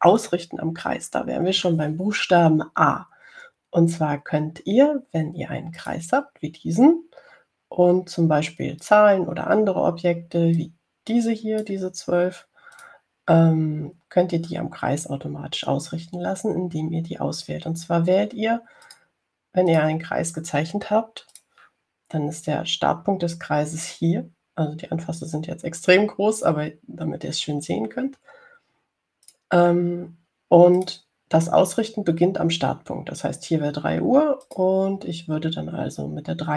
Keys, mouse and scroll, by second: 7.1 click, 10.1 click, 11.9-13.1 drag, 14.0 click, 20.1 click, 21.0 click, 22.6 click, 30.5 click, 32.1 click, 35.7 click.